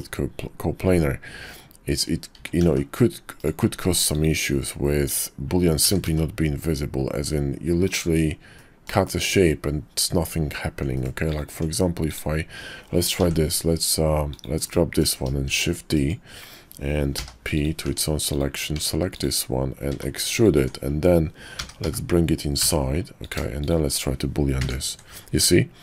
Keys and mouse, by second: 1.4-2.0 middle drag, 2.3 s, 4.1 click, 5.0 click, 5.8 s, 8.5-8.9 middle drag, 10.9 middle click, 11.5 Tab, 13.2 i, 14.6 click, 15.5 shift+d, 17.1 p, 17.9 Tab, 18.7 Tab, 19.9 e, 20.6 Tab, 21.6 g, 24.6 ctrl+KP_Subtract.